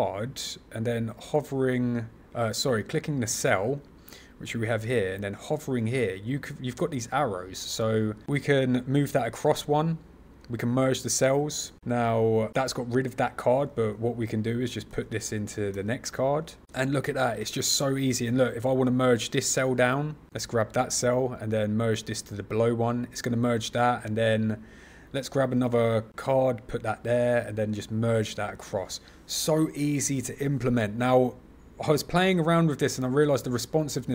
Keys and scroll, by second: 14.8 super+c, 15.6 super+v, 25.5 super+c, 26.0 super+v.